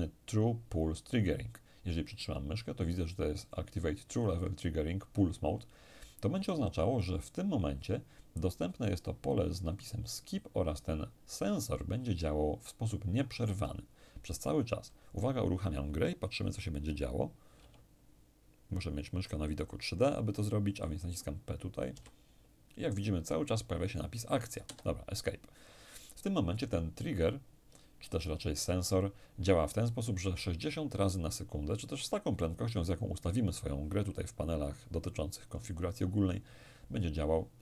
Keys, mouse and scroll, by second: 7.0 click, 17.6 p, 21.9 p, 24.6 Escape.